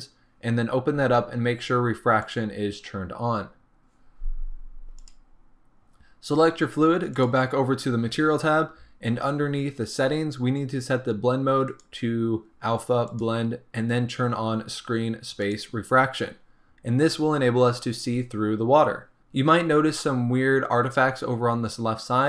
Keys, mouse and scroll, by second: 13.3-15.6 drag.